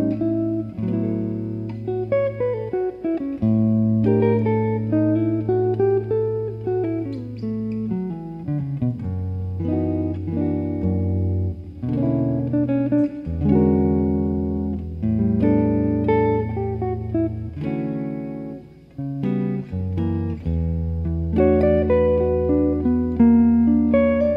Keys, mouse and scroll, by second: 0.7 a, 1.2 a, 1.9 middle click, 3.5 KP_1, 5.9 click, 7.7-9.0 right drag, 8.8-10.6 middle drag, 10.9 KP_1, 12.9 ctrl+e, 18.9-21.8 middle drag, 21.8 right click, 23.7 click, 23.7 middle click.